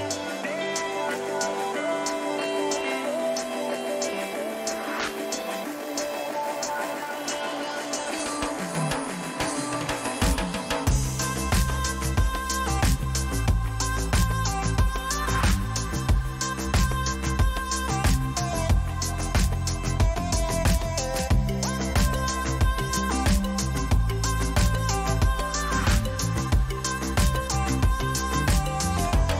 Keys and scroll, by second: 2.7 Return, 4.3 Return, 7.5 ctrl+alt+shift+t, 12.7 ctrl+alt+shift+t, 14.5 ctrl+alt+shift+t, 16.4 ctrl+alt+z, 23.2 ctrl+t, 27.8 Return.